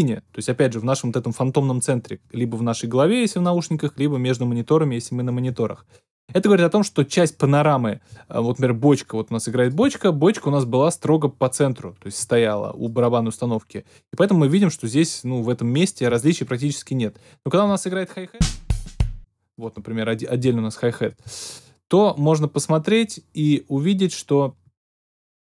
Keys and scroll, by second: 18.3 alt+super+space.